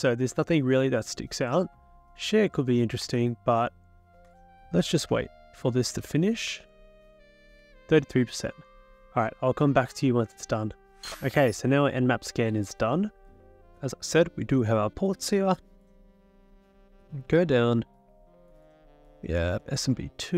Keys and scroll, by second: 5.1 Return, 6.0 Return, 6.5 Return.